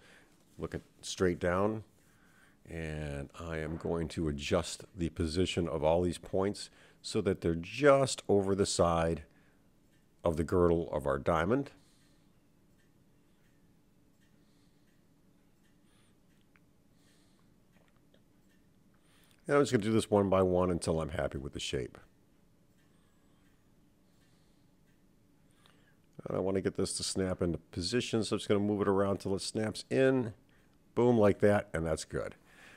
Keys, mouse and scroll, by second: 1.5 click, 2.0 g, 3.8 click, 4.4 g, 6.1 click, 6.4 g, 7.8 click, 8.2 g, 10.1 click, 10.4 g, 12.9 click, 13.2 g, 15.5 click, 15.8 g, 18.7 click, 18.9 g, 21.2 click, 21.5 g.